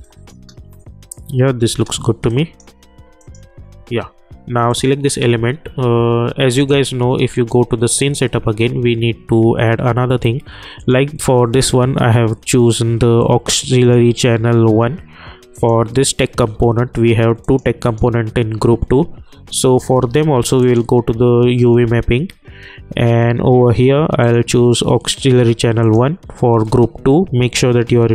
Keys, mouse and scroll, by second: 0.3 space, 2.3 click, 10.8 click, 13.3 click, 22.1-23.2 typing, 26.2 typing.